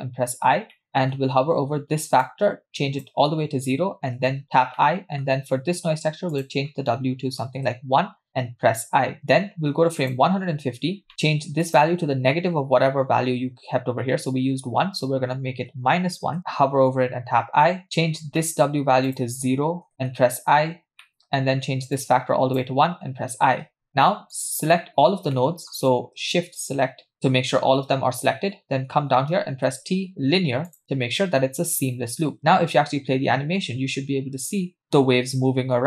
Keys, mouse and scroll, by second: 0.2 i, 0.7 middle click, 2.3 click, 4.2 i, 4.8 middle click, 6.3-7.7 drag, 8.8 i, 10.1 click, 11.1 middle click, 11.7-16.4 drag, 17.2 i, 18.4 middle click, 19.1 click, 20.5 i, 21.0 middle click, 22.0 click, 23.0 i, 23.7-24.3 scroll down 2, 24.4 click, 24.7 middle click, 24.9-25.4 scroll down 2, 25.4 middle click, 26.6 shift+click, 27.1 shift+click, 29.7 t, 32.4 space.